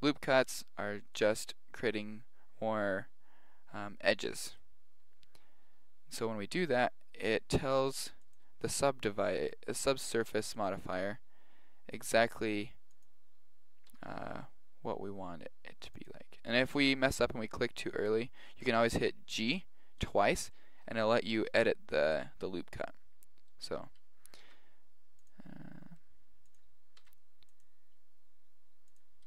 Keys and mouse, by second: 6.2 ctrl+r, 9.3 ctrl+r, 13.9 g, 16.4-23.5 middle drag, 24.4 ctrl+r, 27.0 ctrl+r.